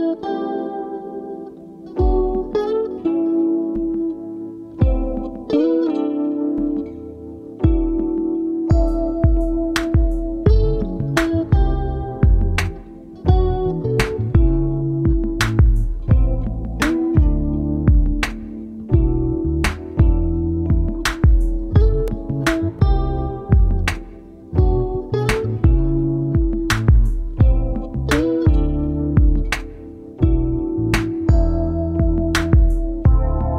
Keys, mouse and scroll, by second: 3.3 double click, 4.2 right click, 10.7 double click, 12.0 alt+BackSpace, 13.4 ctrl+=, 13.7 ctrl+=, 13.9 ctrl+=, 14.5 double click, 17.9 ctrl+=, 18.2 ctrl+=, 18.6 n, 18.9 double click, 19.1 space, 20.5 double click, 21.4 right click, 24.0 double click, 32.5 ctrl+-, 33.0 ctrl+-, 33.2 ctrl+-.